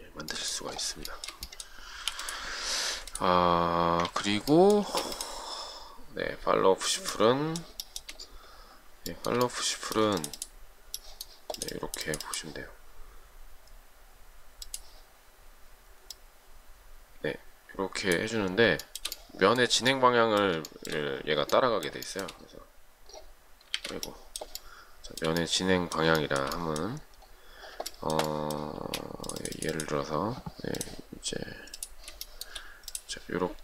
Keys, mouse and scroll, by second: 1.4 shift+middle click, 2.4 m, 4.3 ctrl+z, 5.1 space, 8.1 shift+middle click, 9.3 shift+middle click, 19.1 shift+middle click, 21.0 shift+middle click, 22.3 shift+middle click, 24.0 z, 24.8 shift+middle click, 26.4 shift+middle click, 28.1 shift+middle click, 29.1 space, 32.5 shift+middle click.